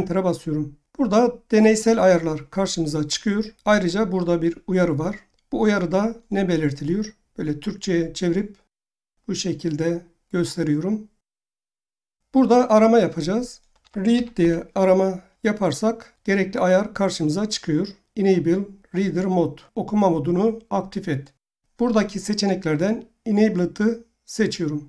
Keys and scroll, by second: 13.4-14.9 typing.